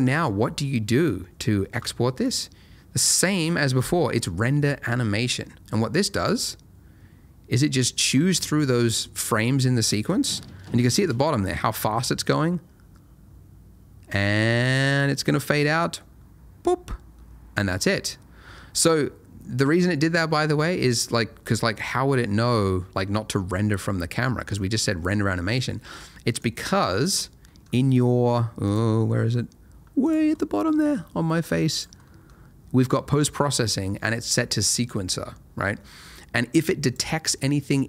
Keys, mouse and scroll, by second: 3.3 click, 20.9 click, 27.4 middle click, 28.6 click, 29.0 middle click, 30.0 click, 30.3 middle click, 31.4 click, 32.0 middle click, 36.8 click.